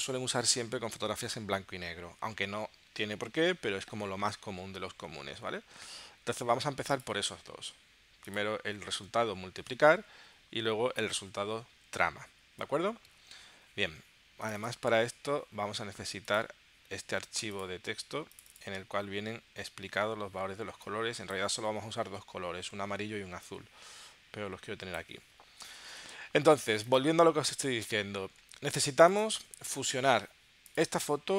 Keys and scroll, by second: 8.9 space, 10.3 Down, 11.7 Up, 12.3 Down, 12.6 space, 21.7 super+w.